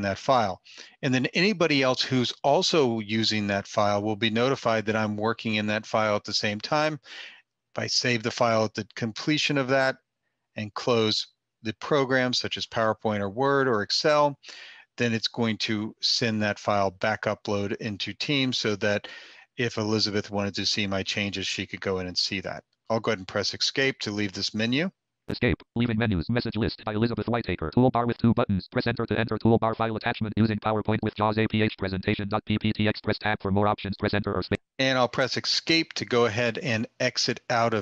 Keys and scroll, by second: 22.9 Escape, 35.1 Escape.